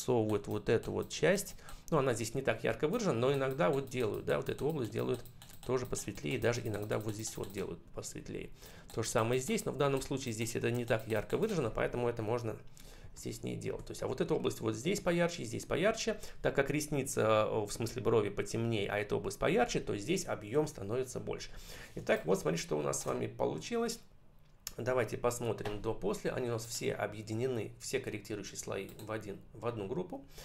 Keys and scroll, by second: 13.0 ctrl+-, 21.8 space.